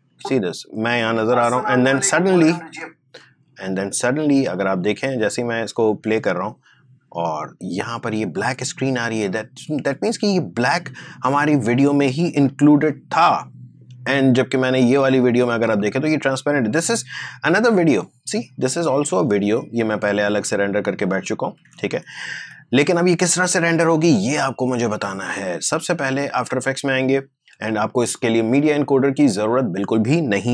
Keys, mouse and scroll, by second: 0.8 space, 5.2 click, 5.9 space, 9.2 space, 11.3 click, 12.7 Delete, 14.7-21.9 drag, 21.9 ctrl+z, 23.6 click, 26.1 click, 26.9 click.